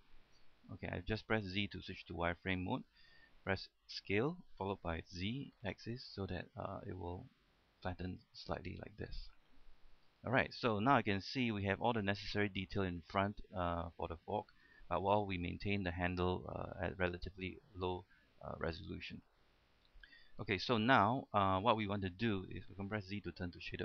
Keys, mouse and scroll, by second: 0.9 z, 1.2 z, 1.6 z, 2.7 z, 4.3 s, 5.4 z, 8.4 click, 8.8-9.8 middle drag, 10.1-10.4 scroll up 1, 10.5 shift+middle click, 11.3 scroll up 1, 11.6 shift+middle click, 13.6-14.7 scroll down 1, 14.8 shift+middle click, 18.7 shift+middle click, 19.8 shift+middle click, 21.5 Tab, 21.9-22.2 scroll down 1, 22.2 Tab, 23.3 z.